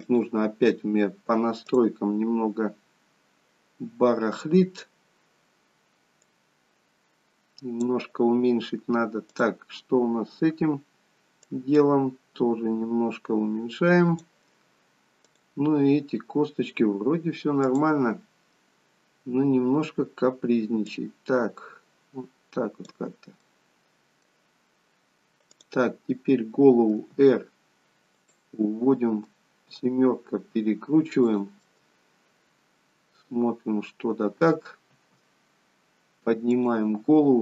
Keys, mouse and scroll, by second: 0.0 click, 1.7 click, 2.3-3.5 scroll down 1, 4.7-5.4 scroll down 4, 6.2 click, 11.4 click, 15.2 click, 17.7 click, 19.1-19.7 scroll down 4, 19.7-20.6 scroll down 2, 20.8 click, 23.4 middle click, 25.5 click, 27.0 r, 28.5 middle click, 29.7 r, 31.7 middle click, 35.0 r.